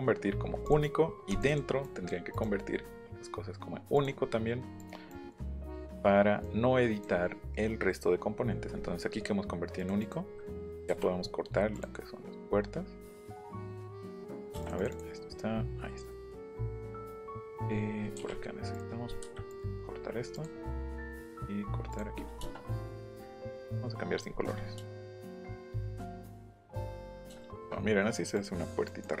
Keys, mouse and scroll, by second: 0.7 click, 1.3 click, 1.5 click, 1.8 click, 2.3 right click, 3.9 click, 4.2 middle click, 4.8 click, 5.1 click, 5.5 right click, 6.4 click, 7.2 middle click, 8.4-8.9 scroll up 2, 9.8 click, 10.0 click, 10.3 scroll up 1, 10.9 l, 11.7 click, 14.6 click, 18.7 click, 19.5 click, 20.3 click, 20.9 click, 21.9 click, 22.1 shift+middle click, 23.5 click, 26.4 click, 27.0 click, 27.4 shift+middle click, 28.3 click, 28.9 click.